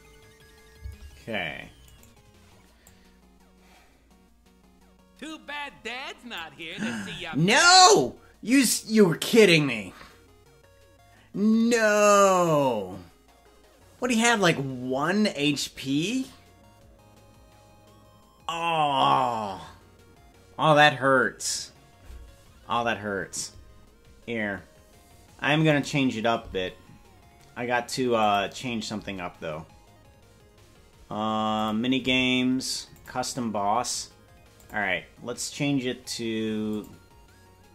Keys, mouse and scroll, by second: 1.9 right click, 1.9 space, 2.9-6.4 drag.